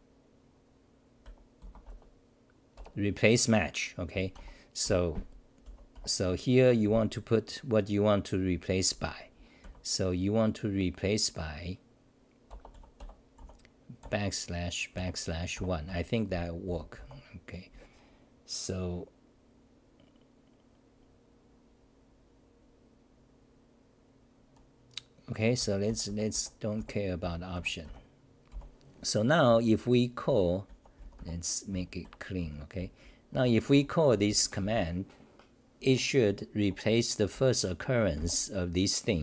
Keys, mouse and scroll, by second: 4.3 Home, 4.8 g, 5.6 n, 5.9 1, 9.6 ., 13.4 u, 15.9 Home, 16.7 n, 25.3-28.5 typing, 29.5-34.6 typing, 33.2 Tab, 36.2-38.6 typing.